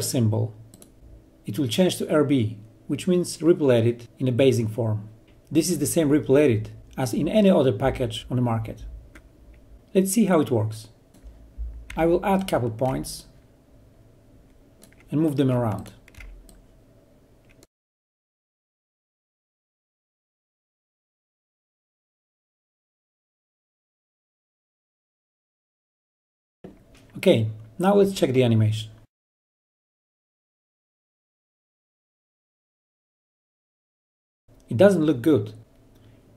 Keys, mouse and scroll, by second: 12.6 ctrl+Delete, 13.0-15.1 ctrl+drag, 17.2-18.9 click, 23.2-23.9 drag, 31.3 click, 31.3-35.4 drag.